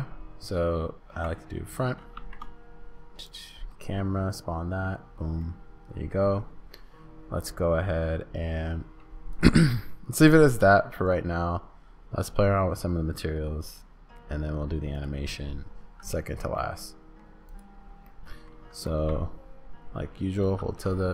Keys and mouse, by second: 2.1 shift+a, 3.8-4.9 middle drag, 5.4 middle click, 7.7-15.1 drag, 9.3-11.0 middle drag, 9.3-11.0 right drag, 16.7 middle click, 18.0 middle click.